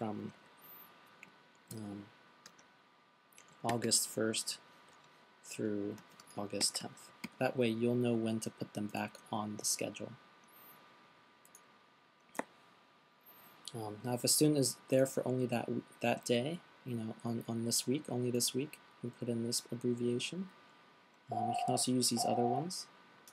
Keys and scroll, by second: 2.2-2.9 typing, 4.1 typing, 5.3-7.7 typing.